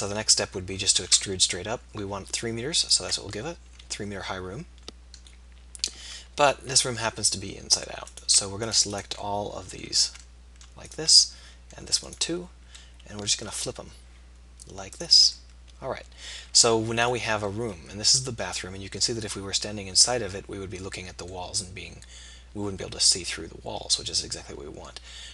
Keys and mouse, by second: 0.3 KP_3, 1.1 e, 5.3 middle click, 6.0 z, 10.4-15.0 middle drag, 15.7-17.0 middle drag, 17.2 middle click, 23.4 middle click.